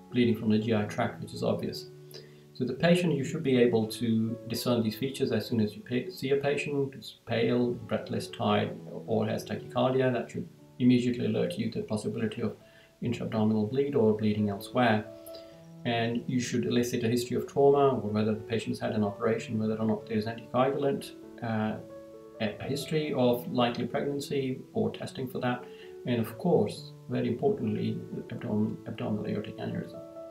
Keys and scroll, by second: 1.3 Down, 14.6 Down, 18.6 Down, 20.8 Down, 24.9 Down.